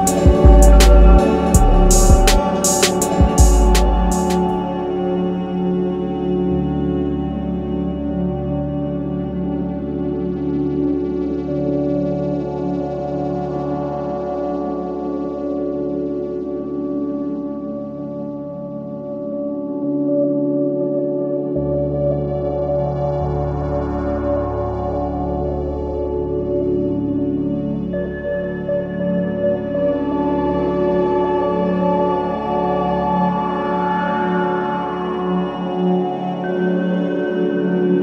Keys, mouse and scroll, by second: 0.1-0.8 scroll up 1, 1.3-1.8 scroll down 1, 1.8-3.7 drag, 3.7-4.2 scroll up 1, 4.2-6.1 scroll up 1, 6.2-8.5 drag, 8.5-9.2 scroll up 1, 9.2-14.3 drag, 15.5 scroll up 1, 15.7 click, 16.6-18.1 drag, 17.9-19.1 typing, 21.1 space, 21.2 click, 24.7-25.7 scroll up 1, 25.7-28.4 drag, 31.5 click, 34.3-34.9 scroll down 1, 35.4-36.3 scroll up 1, 36.3-37.2 typing.